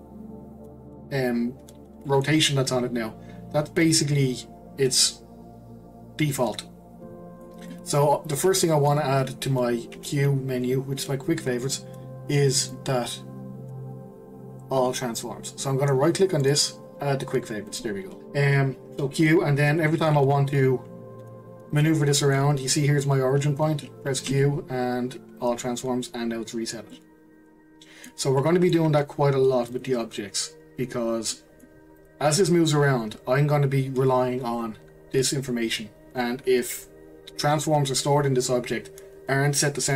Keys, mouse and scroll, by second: 0.1-2.0 scroll up 1, 2.0-5.1 shift+middle drag, 7.1 scroll down 2, 7.3-9.9 middle drag, 9.9 q, 12.6-15.7 drag, 18.2 q, 19.9-21.2 middle drag, 21.2 g, 22.2-24.3 middle drag, 24.3 q, 26.9-29.0 middle drag, 29.0-29.7 scroll up 1, 29.7 click, 30.5 scroll down 4, 30.7-31.3 scroll up 1, 31.3-32.0 middle drag, 32.0 click.